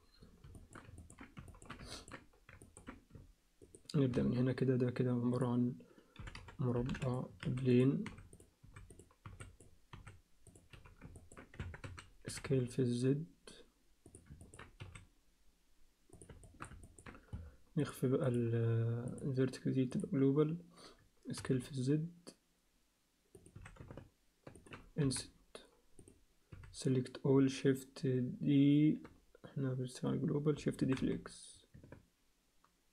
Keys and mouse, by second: 0.6 alt+shift+middle click, 1.0 ctrl+alt+middle click, 1.5 alt+shift+middle click, 1.9 ctrl+alt+middle click, 2.6 ctrl+alt+middle click, 3.6 shift+right click, 4.1 shift+a, 6.1 r, 7.4-10.7 typing, 11.2 ctrl+middle click, 11.6 Tab, 11.9 a, 12.3 s, 14.4 ctrl+alt+middle click, 14.8 s, 16.5 shift+middle click, 16.8 ctrl+middle click, 17.8 click, 19.2-20.2 drag, 21.4 g, 23.5 s, 25.0 i, 26.5 a, 30.8 shift+d.